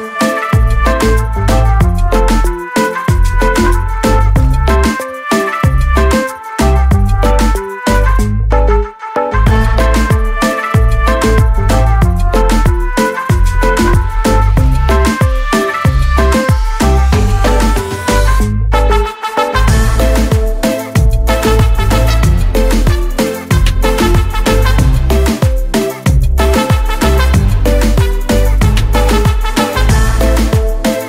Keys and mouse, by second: 3.1 click, 4.1 click, 6.2 click, 7.3 click, 8.7 click, 10.4 click, 14.3 click, 23.2 click, 23.4 double click, 25.3 click, 25.4 double click, 26.5 click, 26.8-28.3 typing, 29.7 click, 30.2 click.